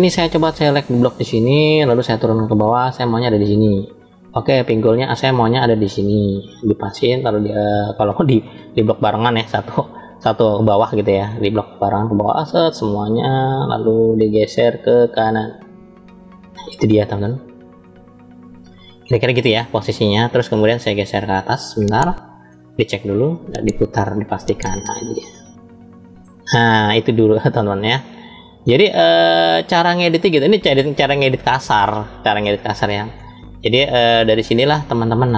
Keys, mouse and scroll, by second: 2.1-3.4 drag, 4.2 click, 5.8-6.8 drag, 7.9 ctrl+z, 11.0-12.0 scroll down 1, 12.0-13.4 drag, 14.3-18.9 drag, 20.6 shift+middle click, 21.8 shift+middle click, 23.0-26.1 middle drag, 26.3-28.5 shift+middle drag, 28.9 shift+middle click, 32.8-35.2 middle drag, 35.2 scroll down 1.